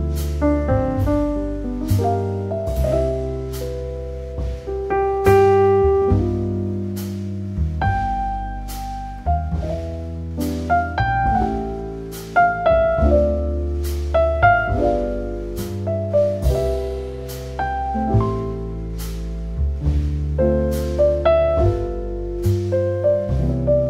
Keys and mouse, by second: 0.6 ctrl+r, 1.8 click, 2.4 click, 3.5 alt+middle click, 4.4 shift+middle click, 5.1-6.9 alt+middle drag, 7.2 Tab, 7.4 click, 7.8 middle click, 8.8 middle click, 9.9 alt+middle click, 10.9 Tab, 11.3 click, 11.8 g, 11.9 z, 12.7 z, 15.3 click, 15.5 alt+middle click, 16.5 s, 17.4 click, 18.0 middle click, 18.9 ctrl+r, 19.8 click, 20.4 ctrl+r, 21.9 click, 22.2 Tab, 22.4 click, 22.6 alt+middle click.